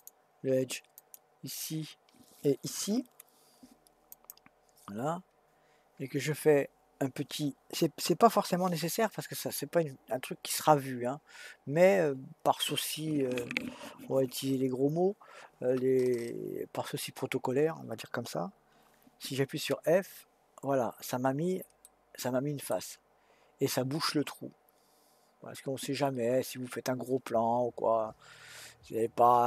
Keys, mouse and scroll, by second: 0.0 click, 1.0 click, 4.1 shift+click, 20.0 f, 21.9-24.9 middle drag.